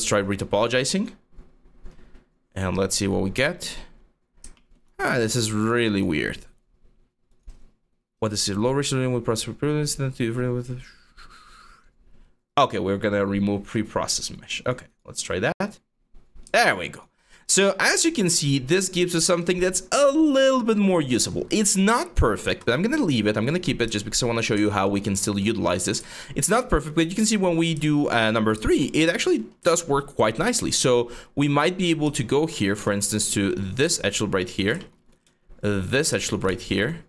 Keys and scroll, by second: 25.1 3, 26.9 1, 27.8 3, 32.4 q.